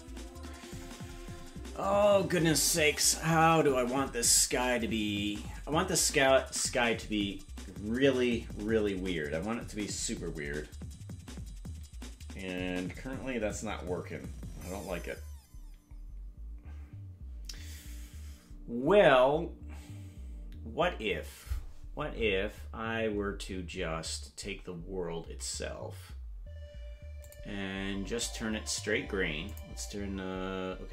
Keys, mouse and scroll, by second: 27.2 click, 29.4 click.